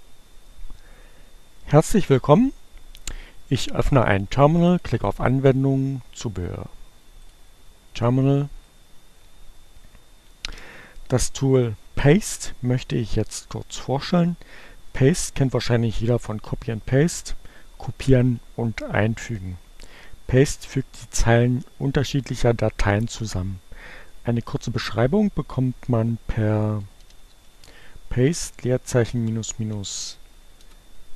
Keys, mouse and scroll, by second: 2.8-4.9 drag, 6.9 click, 8.5-10.2 drag, 25.6-30.3 typing, 30.6 Return.